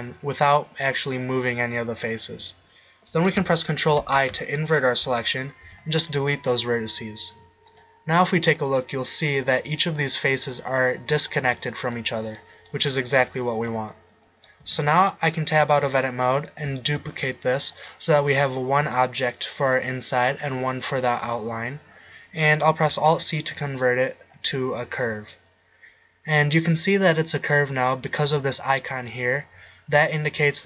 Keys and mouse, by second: 4.0 ctrl+i, 5.7 x, 8.5 right click, 9.4 g, 10.6 g, 11.5 g, 13.2 g, 14.6 Tab, 16.9 shift+d, 23.1 alt+c.